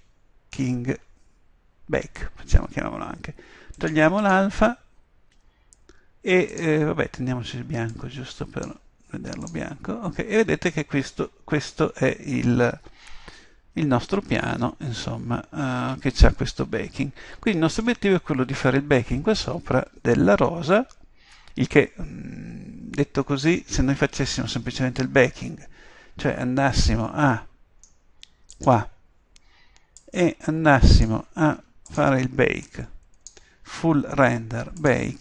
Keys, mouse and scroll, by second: 28.6-34.7 drag, 34.8 click.